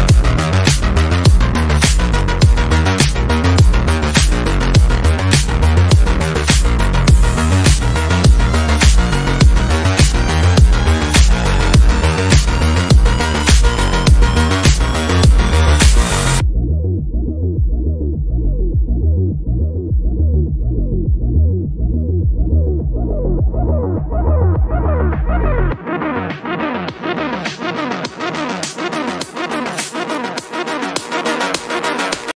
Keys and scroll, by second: 0.5 shift+F2, 0.6 Escape, 13.9 7, 14.0 Return, 17.0 F3, 17.2 Escape, 28.9 F9.